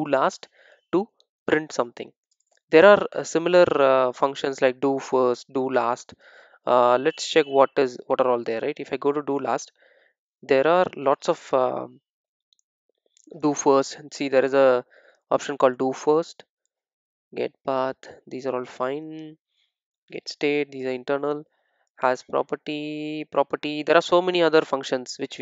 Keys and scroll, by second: 8.5 super+b.